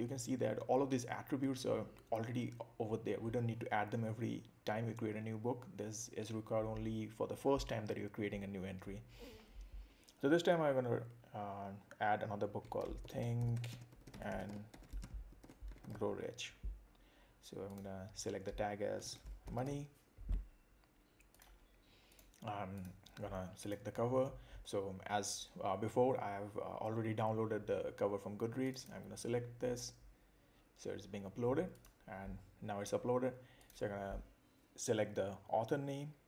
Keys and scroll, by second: 12.8 shift+t, 14.5 shift+g, 15.4 shift+r, 19.0 shift+m.